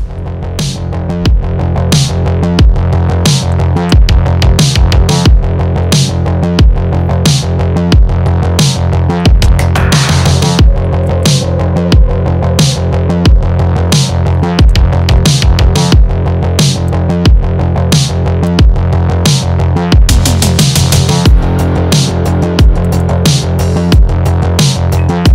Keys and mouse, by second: 0.2 space, 0.2 click, 0.3 space, 0.4 click, 0.8 space, 0.9 click, 0.9 space, 1.1-3.1 drag, 3.1 space, 3.1 click, 3.2 space, 3.4 ctrl+click, 3.7 space, 3.9 ctrl+click, 4.0-6.2 drag, 6.3 click, 7.5 click, 8.4-11.2 typing, 8.6 click, 9.3 click, 10.0 click, 10.2 click, 10.8 click, 10.9 ctrl+click, 11.1 click, 11.3-14.7 ctrl+drag, 14.7 ctrl+d, 15.0 ctrl+z, 15.3-16.7 drag, 16.7 space, 16.7 click, 16.8 space, 16.9 ctrl+click, 17.2 click, 18.2 click, 18.5 space, 18.5 click, 18.6 space, 18.7 click, 19.3 space, 19.3 click, 20.3 ctrl+space, 20.3 ctrl+click, 20.6 click, 21.4-22.9 typing, 21.4 click, 21.7 click, 22.1 click, 22.9 click, 23.3 ctrl+click, 23.5-25.3 drag.